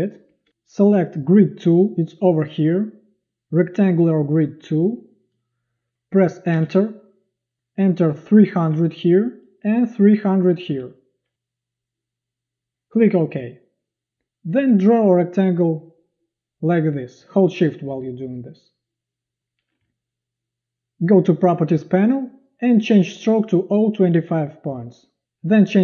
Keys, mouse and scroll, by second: 0.3 v, 6.5 Return, 8.3 3, 8.7 0, 10.2 3, 10.5 0, 13.4 click, 18.5-19.6 shift+drag.